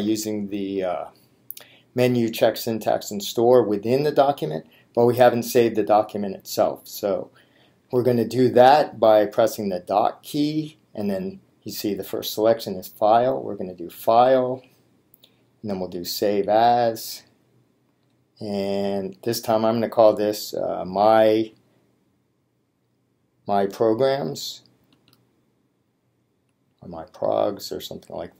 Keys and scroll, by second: 16.2 Down, 17.9 Return, 21.5 m, 25.0 y, 26.6 p.